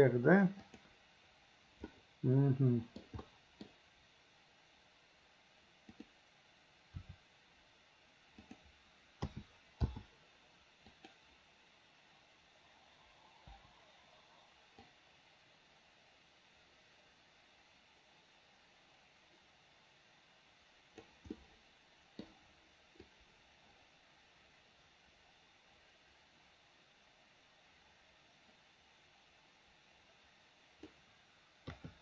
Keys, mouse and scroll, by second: 2.0-3.1 middle drag, 3.3-3.7 middle drag, 3.7-6.0 scroll down 1, 6.0 click, 7.0 r, 9.3 a, 9.9 i, 10.9 click, 13.6 Delete, 14.9-21.1 drag, 21.4-22.3 middle drag, 23.1-31.0 drag, 31.8 KP_3.